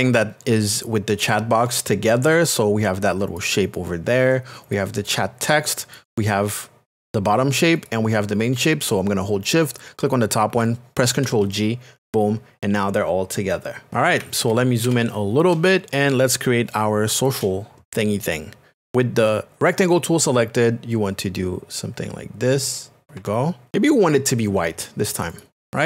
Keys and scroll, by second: 15.5 KP_Add.